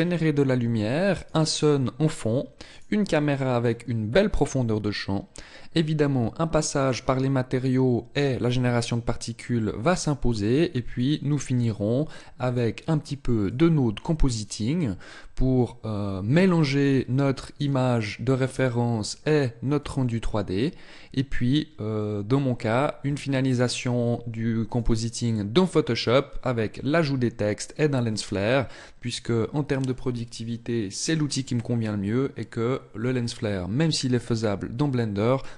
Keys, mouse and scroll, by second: 1.7 right click, 3.1 right click, 11.5 click, 12.5 click.